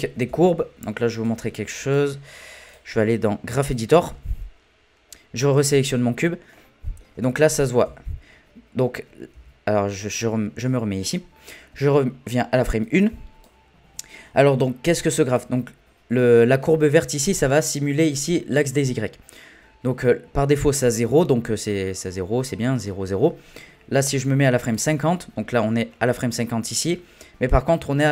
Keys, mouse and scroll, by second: 0.3 n, 1.2-4.0 drag, 4.0 n, 5.5 click, 6.3-6.6 scroll down 1, 6.6 middle click, 7.2-7.6 scroll down 1, 7.6 middle click, 7.8 n, 8.4-9.3 scroll up 1, 9.3 n, 12.8-15.4 drag, 24.2-27.3 drag.